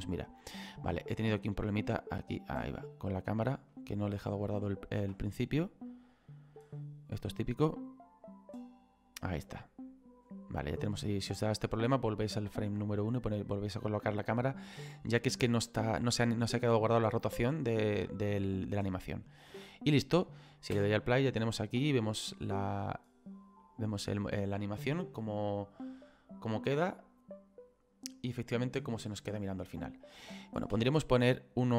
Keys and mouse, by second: 1.5 shift+middle click, 3.0 middle click, 3.9 shift+middle click, 4.7 ctrl+middle click, 5.9 click, 13.5 middle click, 18.8 click, 20.8 space, 23.0 click, 30.8 space.